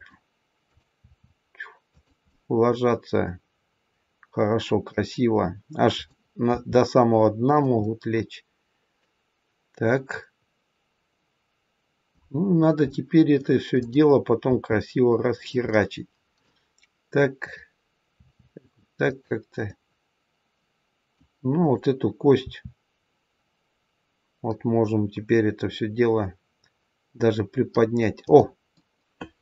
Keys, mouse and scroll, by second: 0.6 click, 1.0 r, 2.2 middle click, 5.9 click, 6.4 r, 7.8 middle click, 12.4-12.9 scroll up 2, 12.9 middle click, 13.7 click, 14.4 r, 15.6 middle click, 17.3 click, 18.1 r, 19.5 middle click, 21.5 click, 22.4 r, 28.6 middle click.